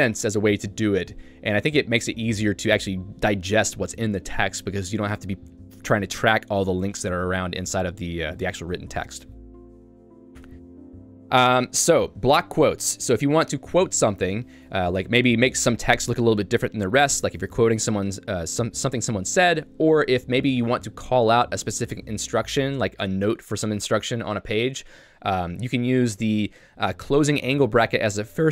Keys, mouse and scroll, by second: 8.2 Escape, 8.8 j, 10.4 Tab, 12.2 j.